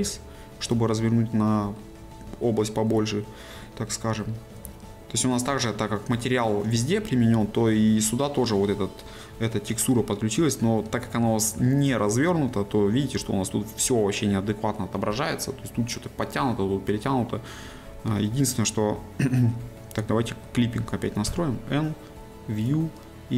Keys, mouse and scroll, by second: 0.9-4.4 shift+middle drag, 5.1 shift+middle click, 10.6-12.1 shift+middle drag, 18.5-21.3 ctrl+middle drag.